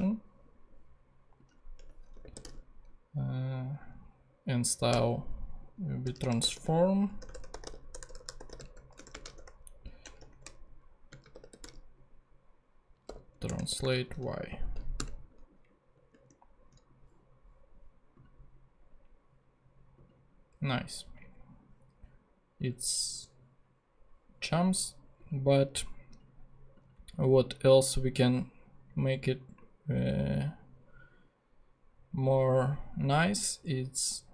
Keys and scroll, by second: 1.7 Return, 1.9-2.9 typing, 4.9 n, 6.0-9.8 typing, 11.1-13.8 typing, 13.4 Return, 14.5 super+space, 14.6 super+Right, 15.0 super+,, 15.8 ,.